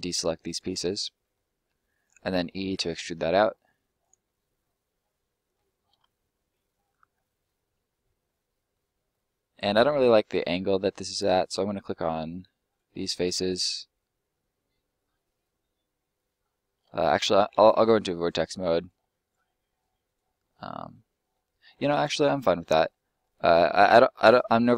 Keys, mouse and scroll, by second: 0.8 middle click, 1.6 e, 3.9 click, 4.2 middle click, 8.9 middle click, 12.7 right click, 12.9 shift+right click, 15.1 middle click, 17.8 click, 18.2 middle click, 18.7 right click, 18.9 shift+right click, 19.9 shift+right click, 20.3 right click, 20.4 middle click, 21.7-22.4 scroll down 1, 22.4 middle click, 23.2-24.3 scroll up 1, 24.3 middle click.